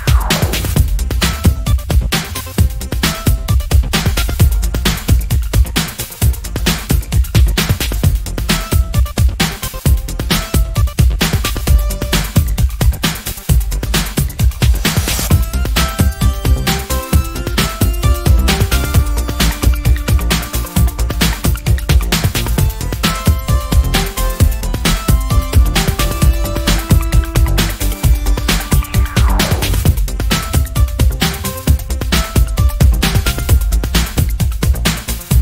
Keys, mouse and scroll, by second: 2.0-3.5 ctrl+drag, 4.1 d, 4.9 click, 5.8 ctrl+click, 7.3 shift+click, 8.7 shift+click, 11.0 click, 11.5 click, 12.1 click, 12.6 click, 14.9 ctrl+middle click, 15.8 click, 17.0-17.5 scroll up 3, 18.4-19.9 ctrl+drag, 20.1-20.6 ctrl+scroll down 2, 21.8 ctrl+shift+click, 25.1 ctrl+scroll, 27.4-27.9 ctrl+scroll up 1, 27.9 ctrl+click, 30.0 click, 31.8 ctrl+d, 32.5 ctrl+click, 33.6 ctrl+click, 34.8 ctrl+shift+click.